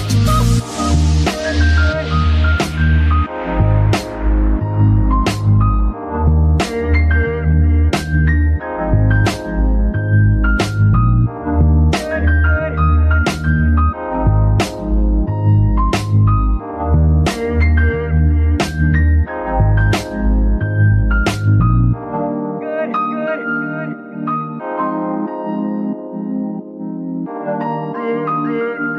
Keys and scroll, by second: 0.5 a, 0.8 g, 1.8 Escape, 16.8 ctrl+Tab, 19.9 shift+z.